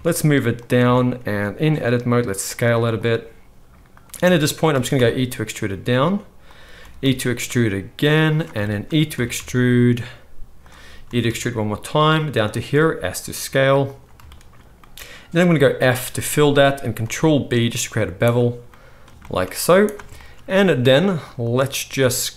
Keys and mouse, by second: 0.7 Tab, 1.2 s, 2.6 z, 3.9 click, 4.7 e, 6.7 e, 8.8-21.5 middle drag, 9.1 e, 11.0 e, 12.9 s, 15.5 f, 17.0 ctrl+b, 19.6 z, 21.5-22.3 drag, 21.9 alt+a.